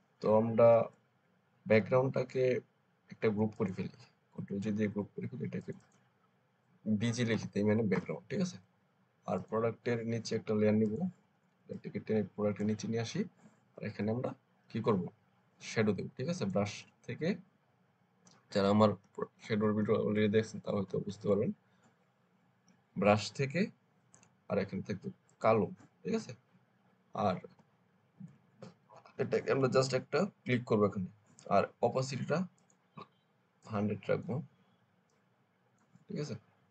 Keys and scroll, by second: 4.7 ctrl+g, 7.0 b, 7.2 g, 7.8 Return, 18.6-20.9 typing, 27.3 [, 27.4 [.